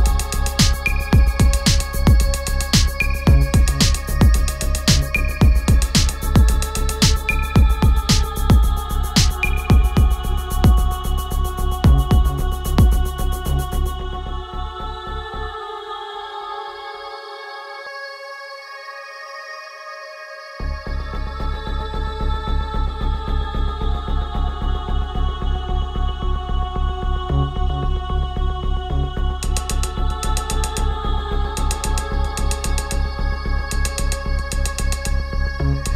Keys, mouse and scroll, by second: 8.0-13.7 drag, 16.2 click, 20.3-35.9 drag.